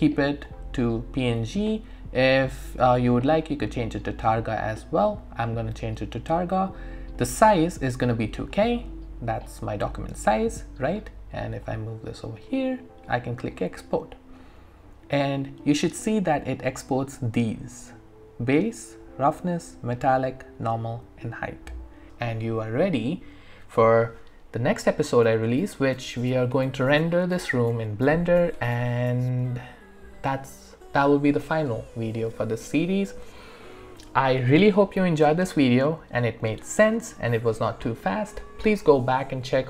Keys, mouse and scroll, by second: 0.5 click, 2.0-3.3 scroll down 1, 3.3 click, 7.2 click, 11.6-13.6 drag, 22.1 click.